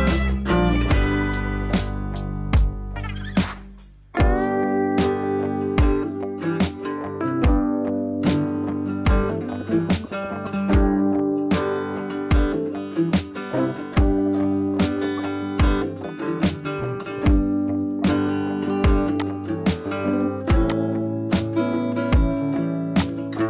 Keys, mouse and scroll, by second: 7.8-9.0 scroll down 1, 10.3-11.6 drag, 16.4-17.7 drag, 22.9-23.4 drag.